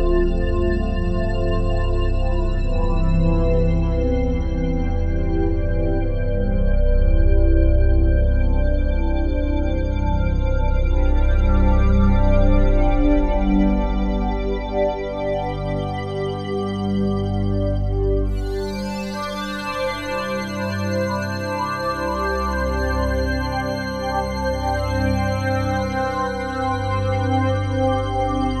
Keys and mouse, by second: 0.3-1.7 ctrl+alt+drag, 2.6 click, 4.4 click, 5.6 ctrl+s, 5.9 alt+a, 6.6-8.6 alt+shift+drag, 9.0 ctrl+alt+click, 10.5 click, 11.8-13.7 drag, 13.7 1, 14.0 Return, 16.8 click, 17.6 click, 18.7 click, 19.1 click, 19.7 Escape, 20.4-21.8 drag, 23.3 click, 24.5 click, 25.9-28.6 drag.